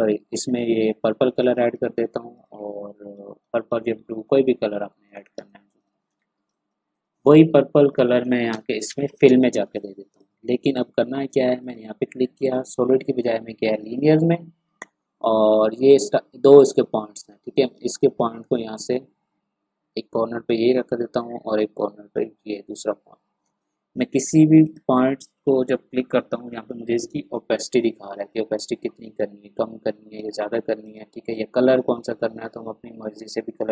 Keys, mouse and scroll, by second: 1.4 click, 2.6 ctrl+c, 2.8-3.2 ctrl+scroll down 1, 3.7-4.2 scroll down 2, 5.0 click, 5.4 space, 5.4 click, 6.0 ctrl+scroll up 1, 8.1 ctrl+v, 8.5 Return, 9.2 space, 9.4-11.6 drag, 17.7-21.5 drag, 27.5-33.7 drag.